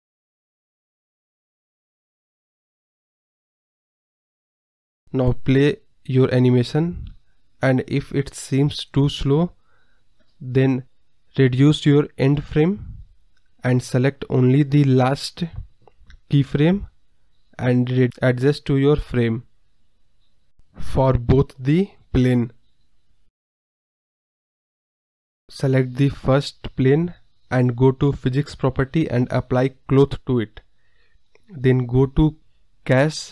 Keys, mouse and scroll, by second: 0.1 click, 0.8-2.0 drag, 4.6 click, 5.1 click, 5.3-5.6 scroll up 7, 6.1 space, 6.3 scroll down 1, 6.5 scroll up 1, 11.9 scroll down 2, 12.2 scroll up 1, 15.0 space, 15.5 click, 16.1 KP_0, 18.2-19.3 scroll down 2, 20.3 click, 20.5-21.5 drag, 21.6 click, 22.2 click, 23.0 ctrl+z, 23.3 click, 23.6 click, 24.0 drag, 24.6 click, 26.3 space, 28.0 space, 28.2-28.6 scroll down 3, 28.3 middle drag, 28.6 middle click, 29.1 click, 31.3 click, 31.9-32.5 scroll down 2, 32.9 click.